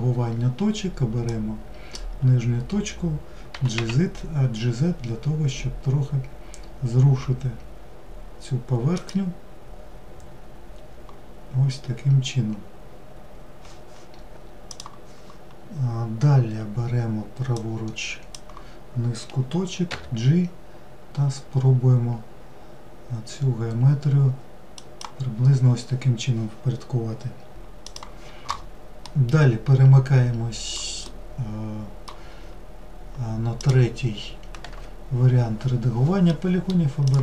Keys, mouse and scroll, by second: 1.1 click, 17.5 drag, 28.7-33.2 middle drag, 33.2-36.0 drag, 36.0-36.7 middle drag, 36.7 click.